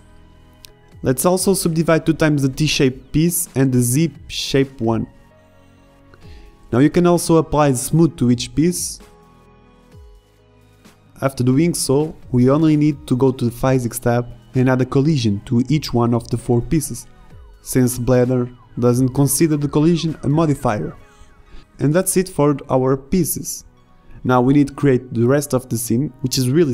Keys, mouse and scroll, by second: 0.8 Tab, 1.3 Tab, 1.7 middle click, 1.7 a, 1.7 a, 1.8 w, 2.1 w, 2.6 Tab, 3.0 Tab, 3.9 a, 4.1 a, 4.1 w, 4.5 w, 4.8 Tab, 9.5-10.6 middle drag, 11.0-13.0 middle drag, 11.7 n, 21.5 right drag, 22.1 right click, 24.6 shift+a.